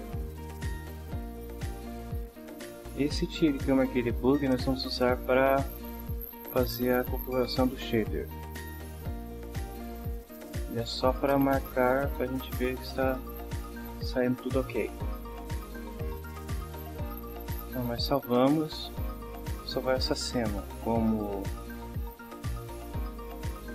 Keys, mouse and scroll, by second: 0.4-1.3 drag, 2.1 click, 18.4 ctrl+s, 22.5-23.7 typing.